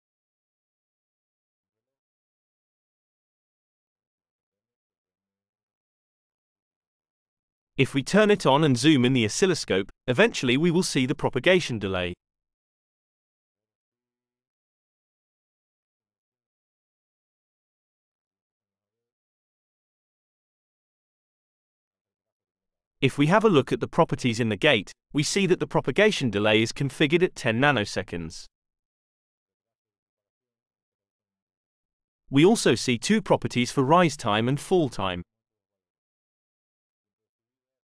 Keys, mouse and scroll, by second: 0.4 click, 2.6 click, 5.1 click, 6.0-7.6 drag, 8.3-9.7 drag, 10.8-11.8 drag, 12.4-19.7 drag, 21.5 click, 23.1 click, 25.5 click.